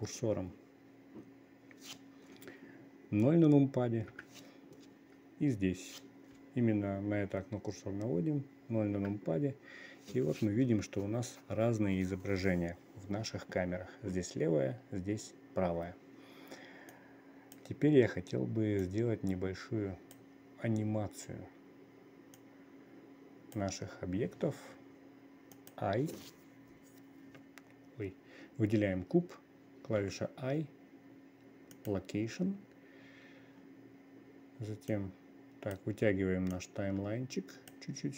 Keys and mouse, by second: 4.6 KP_0, 9.5 KP_0, 17.4-18.1 drag, 19.3-20.7 drag, 22.9-24.1 drag, 26.1 click, 30.5 i, 35.4-38.1 drag.